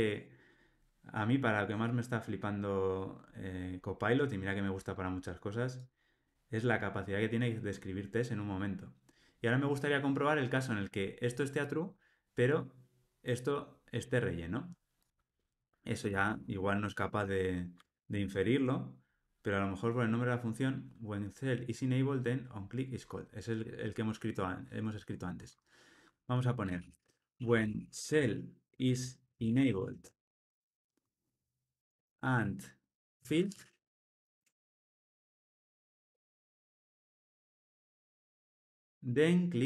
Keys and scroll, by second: 17.7 Tab.